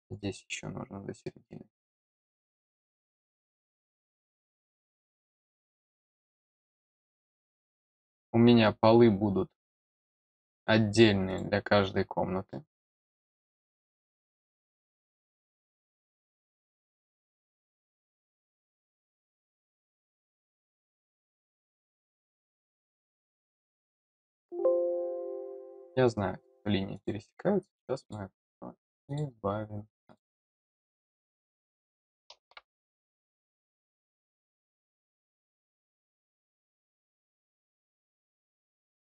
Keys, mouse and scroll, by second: 0.4 click, 1.7 click, 3.0 click, 7.5 click, 9.6 click, 10.5 click, 11.2 click, 12.4 middle click, 13.5 click, 14.0 click, 15.2 click, 16.5 click, 17.5 click, 18.0 click, 18.9 click, 20.1 middle click, 23.3 click, 24.3 click, 26.9 click, 28.0 click, 29.0 click, 30.0 click, 30.8 click, 33.6 click, 34.2 click, 35.0 middle click, 36.3 click, 37.4 click, 38.8 click.